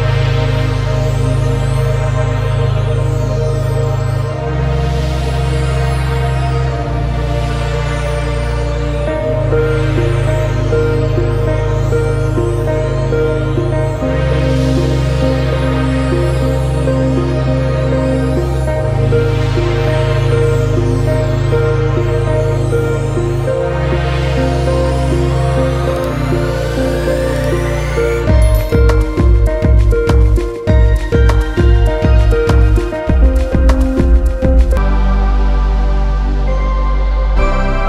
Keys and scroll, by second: 4.4 ctrl+alt+z, 13.4 ctrl+z, 20.3 ctrl+alt+z, 31.6 ctrl+alt+z, 37.0 ctrl+alt+z.